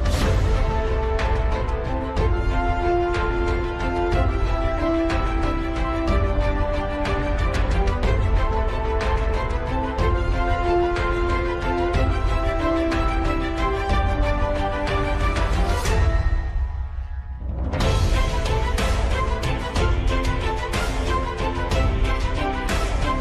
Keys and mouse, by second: 0.1 KP_3, 2.5 s, 5.4 g, 9.4 g, 13.2 KP_7, 14.4 shift+middle click, 15.0 middle click, 15.9 middle click, 21.5 g.